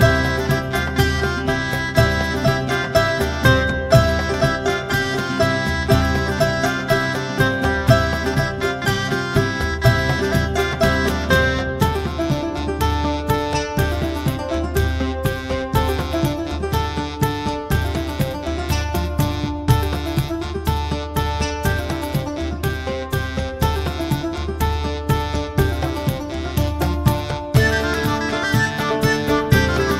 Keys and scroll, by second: 0.0-0.5 typing, 1.8-2.5 typing.